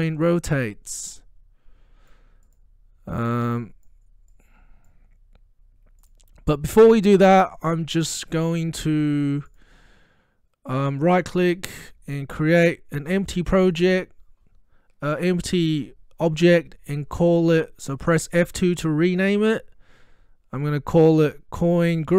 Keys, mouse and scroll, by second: 9.5 click, 11.2 right click, 13.2 click, 18.4 F2, 21.4-22.1 typing.